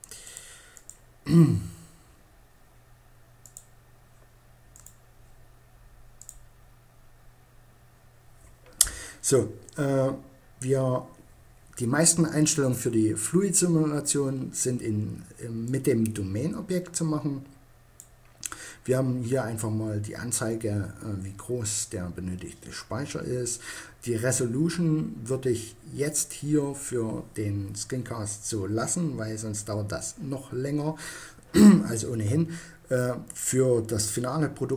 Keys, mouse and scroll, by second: 2.6 click, 2.8-3.9 right drag, 3.9 middle click, 4.3-5.4 right drag, 5.4 middle click, 5.7-7.0 right drag, 14.9 right click, 15.3-16.6 drag.